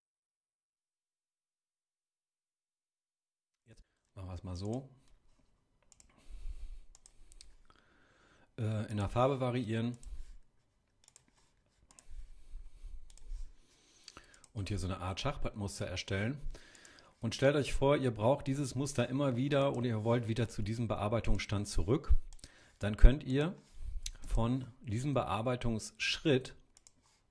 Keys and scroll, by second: 2.3 super+j.